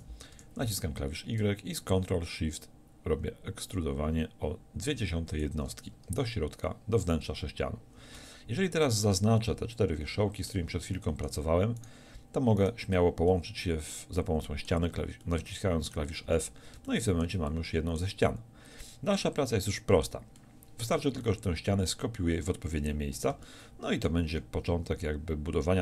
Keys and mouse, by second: 5.4-8.9 drag, 8.9 right click, 9.7 click, 10.5 middle click, 14.3 middle click, 15.7 right click, 16.3 f.